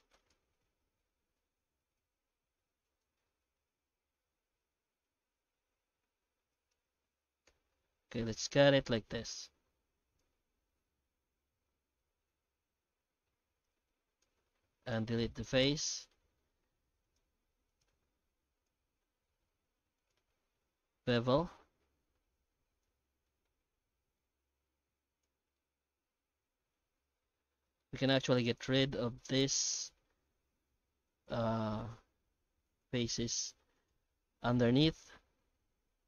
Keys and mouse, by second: 0.3 ctrl+z, 0.5 ctrl+z, 0.7 ctrl+z, 0.8 ctrl+z, 1.0 ctrl+z, 1.4 ctrl+z, 1.9-3.0 middle drag, 3.4 shift+middle click, 3.8 Tab, 4.2 Tab, 4.7 Tab, 4.9 Tab, 5.2 Tab, 5.9 alt+x, 6.8 Tab, 7.4 alt+x, 14.2 x, 15.3 middle click, 15.9 1, 16.1 middle click, 17.0 right click, 17.7 shift+right click, 18.3 g, 20.9 ctrl+shift+b, 22.9 Tab, 23.2 middle click, 23.6 alt+a, 24.2 middle click, 24.9 Tab, 25.2 shift+z, 25.6 shift+middle click, 26.9 alt+a, 27.8 shift+middle click, 30.5 k.